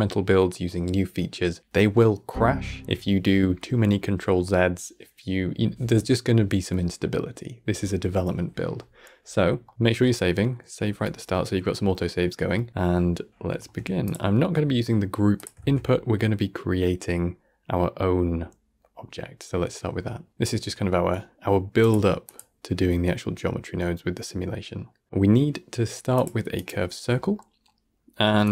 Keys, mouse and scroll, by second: 9.5 middle click, 9.7-10.0 scroll up 3, 10.0-13.0 middle drag, 13.0-13.4 scroll up 2, 13.4-13.9 shift+middle drag, 13.9-14.8 drag, 14.8-15.2 middle drag, 15.2 click, 15.5 shift+a, 26.9-27.2 scroll up 1, 27.2-28.3 middle drag, 28.3-28.5 drag.